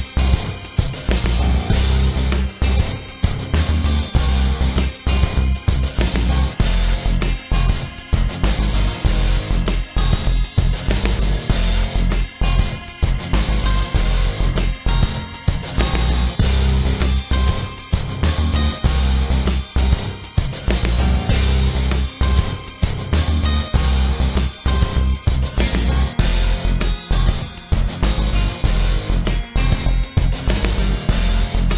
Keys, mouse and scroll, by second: 0.4 a, 0.7 middle click, 1.7 alt+right click, 1.9 x, 3.1 alt+right click, 3.3 x, 4.6 alt+right click, 4.9 x, 5.8 a, 6.1 middle click, 7.4 Tab, 7.7 scroll down 1, 7.9 shift+middle click, 8.5 Tab, 8.9 middle click, 10.2 alt+right click, 10.7 x, 11.3 middle click, 12.4 alt+right click, 12.7 x, 13.2 a, 13.5 middle click, 13.9 shift+middle click, 14.3 scroll up 2, 14.5 scroll down 1, 14.6 scroll up 1, 14.7-15.1 scroll down 3, 15.1 shift+middle click, 15.4 scroll up 1, 16.0 alt+right click, 16.7 alt+right click, 17.2 alt+right click, 17.6 x, 18.4 alt+right click, 18.8 x, 20.1 alt+right click, 20.3 x, 21.1 alt+right click, 21.7 alt+right click, 22.4 alt+right click, 22.9 alt+right click, 23.2 x, 23.7 middle click, 24.6 middle click, 25.7 alt+right click, 26.1 x, 26.9 alt+right click, 27.2 x, 28.0 alt+right click, 28.3 x, 28.9 a, 29.1 scroll down 1, 29.1 middle click, 29.7 scroll up 2, 30.1 middle click, 30.9 alt+right click, 31.3 x.